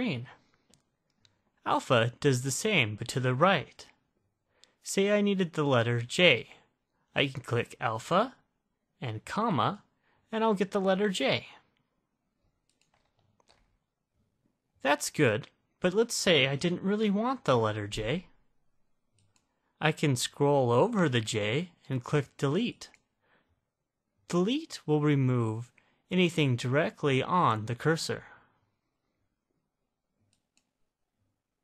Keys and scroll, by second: 9.9 ,, 19.5 (, 22.9 Delete, 30.7 9.